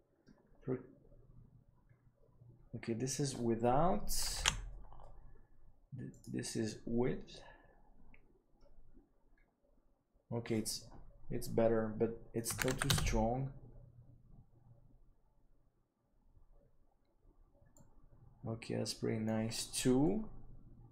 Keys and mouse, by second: 5.1 ctrl+s, 7.9 click, 12.5-14.9 drag, 17.7-19.2 middle drag, 20.0-20.9 middle drag.